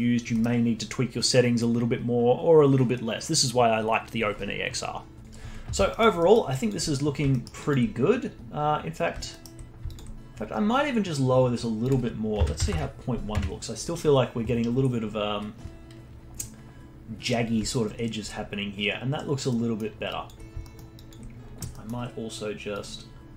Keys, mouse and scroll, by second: 0.0 scroll down 3, 0.3-3.5 middle drag, 5.8 middle click, 6.2 middle click, 6.4-6.9 alt+drag, 6.9 scroll up 2, 7.3 alt+middle click, 7.6-9.3 alt+drag, 9.3 alt+middle click, 9.8-14.8 alt+drag, 19.5 alt+middle click, 20.1 alt+click, 20.6 alt+middle click, 21.0 alt+click, 21.7 middle click, 22.7 click, 23.1-23.3 scroll down 1.